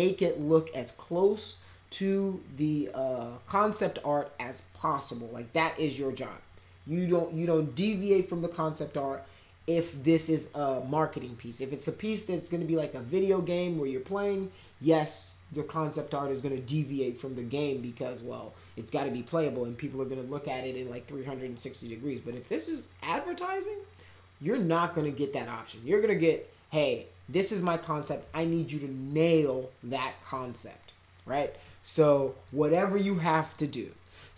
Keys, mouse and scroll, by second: 29.1 F5, 31.6 middle click, 32.4 middle drag, 33.0-33.5 middle drag.